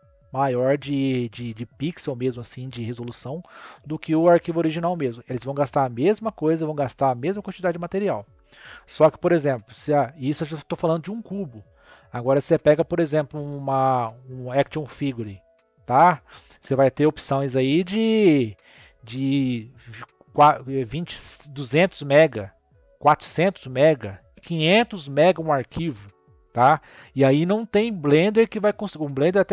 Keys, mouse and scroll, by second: 9.7 click, 11.2 click, 12.0-12.5 scroll down 4.